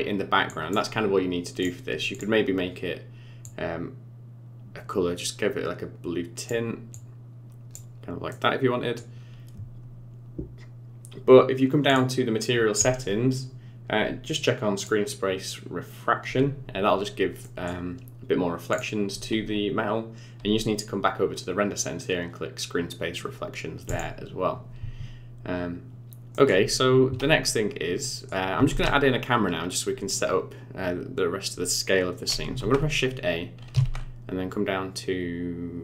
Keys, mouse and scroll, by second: 0.4 click, 2.1 click, 8.3 middle click, 11.8 click, 12.5-14.7 scroll down 18, 14.7 click, 17.4 middle click, 18.7 click, 23.8 click, 26.3 middle click, 26.6 scroll down 6, 27.4 middle click, 28.6 shift+a, 32.5 shift+a, 33.8 shift+a.